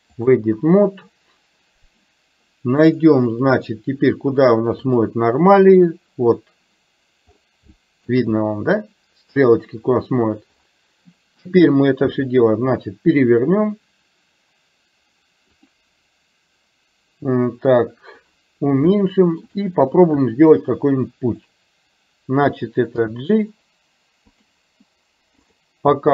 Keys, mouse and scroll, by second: 3.4-5.6 drag, 7.7 shift+middle click, 12.1 r, 18.9 shift+middle click, 20.7 click, 23.1 g, 25.9 g.